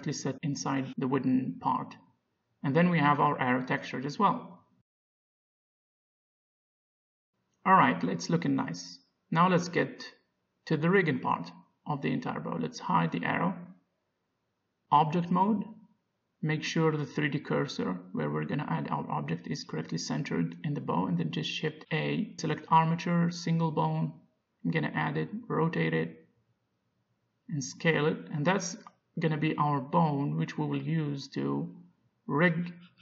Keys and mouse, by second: 0.9-2.0 middle drag, 2.6 middle click, 3.3 z, 8.0 middle click, 11.4 KP_5, 13.6 click, 13.9 Tab, 14.5 Tab, 16.2 shift+a, 17.3 click, 17.9 shift+c, 19.9 middle click, 22.8 shift+a, 25.0 r, 27.6 s, 29.3 Tab, 30.1 Tab, 30.4 g, 32.5 z.